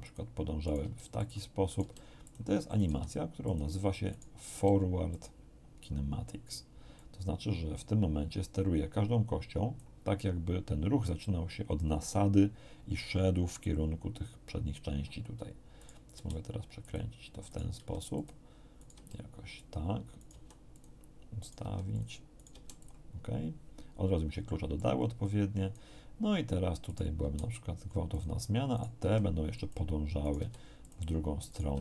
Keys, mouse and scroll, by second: 0.0 click, 0.6 right click, 0.8 r, 1.1 click, 1.7 right click, 1.7 r, 2.2 click, 2.7 click, 2.7 right click, 2.9 r, 3.4 click, 4.1 right click, 4.5 r, 5.1 click, 6.9-9.9 drag, 15.7 right click, 16.1 r, 16.8 click, 17.5 right click, 17.7 r, 18.1 click, 18.7 right click, 18.9 r, 19.5 click, 20.1 click, 20.1 right click, 20.3 r, 20.7 click, 21.4 right click, 21.6 r, 21.9 click, 22.3 right click, 22.5 r, 22.8 click, 24.7 click, 26.9 right click, 27.2 r, 28.1 click, 28.7 right click, 29.0 r, 29.5 click, 30.2 right click, 30.3 r, 30.8 click, 31.5 right click, 31.7 r.